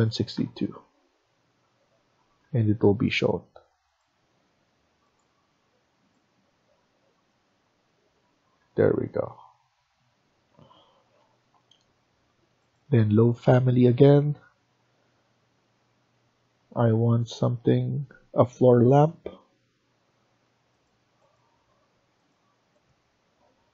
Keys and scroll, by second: 0.0-0.7 typing, 2.1 Escape, 2.3 Escape, 4.5 Escape, 8.3 Escape, 8.4 Escape, 8.8 Escape, 10.4 Escape.